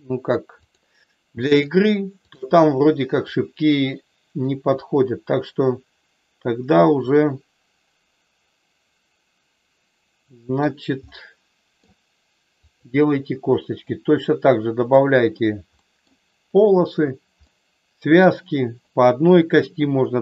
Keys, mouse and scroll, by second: 0.5 click, 3.2-4.3 drag, 4.8-6.3 middle drag, 6.4-10.7 middle drag, 11.1 middle click, 12.6 click, 13.8-14.8 drag, 15.8 middle click, 17.4 middle click.